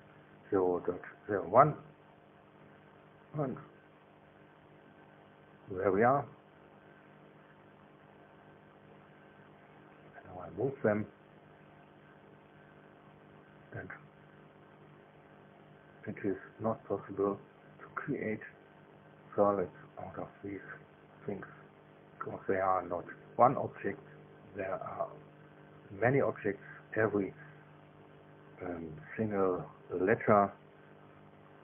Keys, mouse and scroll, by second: 0.2 KP_1, 0.5 KP_Enter, 7.1 space, 10.4 click, 11.7 click, 13.3-17.9 middle drag, 17.9 click, 18.2-21.1 middle drag, 21.1 click, 21.3 middle click, 24.3 click, 27.6-28.4 scroll down 1, 28.5-30.1 scroll down 4.